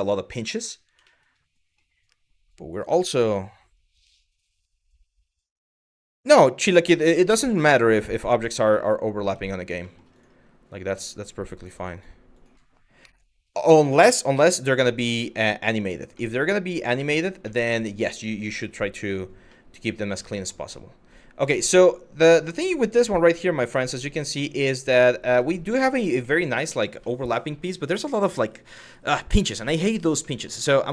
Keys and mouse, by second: 0.7 shift+middle drag, 7.9 Tab, 8.9 Tab, 11.3 click, 11.6 click, 12.0 click, 12.6 KP_Divide, 14.0 KP_Divide, 15.1-15.4 middle drag, 15.9 middle click, 16.6 shift+middle drag, 17.2 middle click, 19.1-19.7 middle drag, 20.7 click, 21.1 Tab, 21.6 middle click, 22.9 Tab, 23.4-24.7 middle drag, 25.8-26.2 middle drag, 26.6-27.0 middle drag, 27.9 middle click, 28.5 middle drag, 29.2 middle drag, 29.9 middle click.